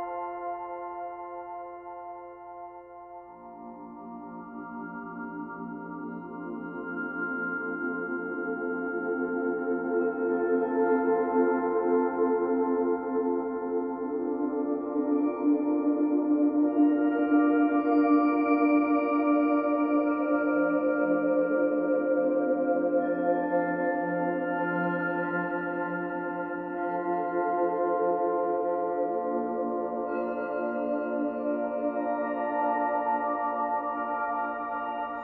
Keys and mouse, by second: 1.1-3.1 drag, 3.6 click, 4.7 click, 6.5-9.9 alt+drag, 10.2-11.1 drag, 11.1 ctrl+s, 12.4 click, 14.0-16.2 alt+drag, 16.7 0, 18.1-19.9 alt+drag, 20.5 ctrl+alt+shift+click, 21.0 ctrl+alt+shift+click, 21.5 ctrl+alt+drag, 23.1 alt+click, 23.7 alt+shift+click, 24.4 alt+shift+click, 25.2 alt+shift+click, 26.0 alt+shift+click, 26.5 alt+shift+click, 27.5 ctrl+s, 27.9 alt+a, 28.4-31.8 alt+drag, 32.3 click, 33.4 click.